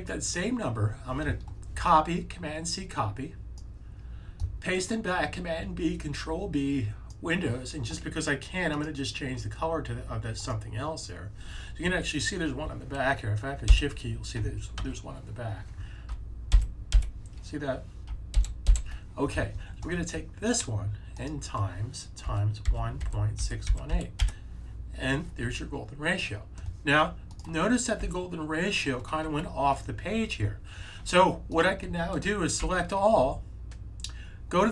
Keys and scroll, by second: 13.6 Right, 14.7 super+z, 16.3 Right, 16.8 Right, 18.3 Left, 18.8 Left, 21.9-24.3 typing, 27.9 -, 32.5 super+a.